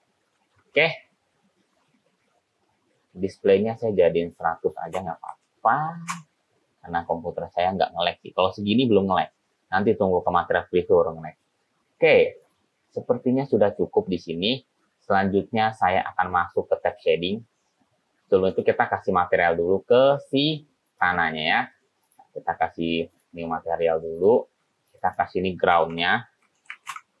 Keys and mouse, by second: 0.7 ctrl+z, 4.4-6.9 drag, 5.5 0, 12.5 click, 18.6 click, 21.0-22.2 drag, 23.2 click, 24.2 click, 25.0 click, 25.1-27.2 drag.